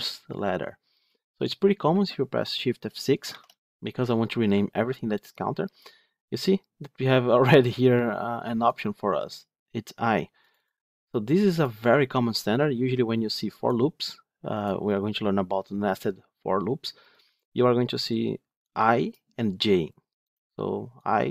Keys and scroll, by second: 3.3 shift+F6.